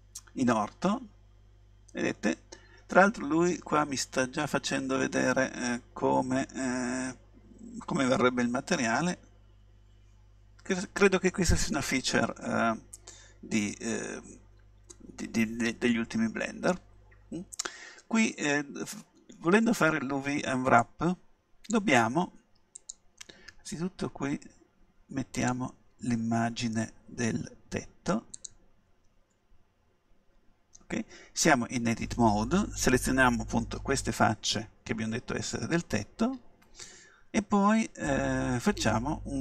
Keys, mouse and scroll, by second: 0.9-3.4 middle drag, 13.2-14.2 middle drag, 14.2-15.5 scroll up 1, 15.5-16.8 middle drag, 20.9-24.8 drag, 25.4-27.3 drag, 29.6-32.4 middle drag.